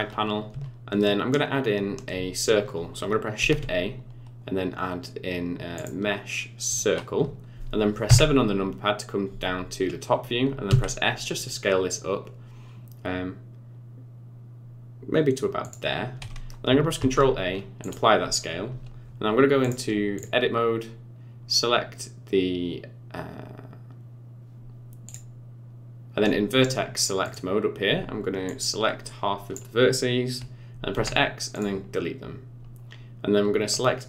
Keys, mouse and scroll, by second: 3.4 shift+a, 8.1 KP_7, 10.7 s, 17.0 ctrl+a, 19.6 click, 25.1 click, 27.3 click, 28.5 click, 30.9 x.